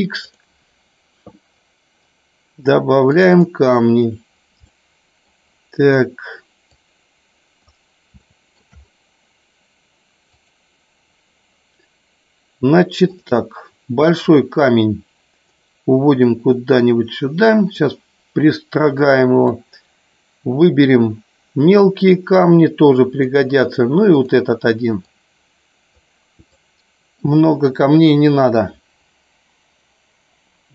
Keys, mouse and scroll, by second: 4.6 middle click, 6.7 click, 8.2 scroll up 1, 8.4 shift+middle drag, 10.2 click, 13.0 click, 14.2-15.5 drag, 16.2-17.7 drag, 18.8-19.5 drag, 22.5 click, 25.1 click, 26.5-27.2 drag.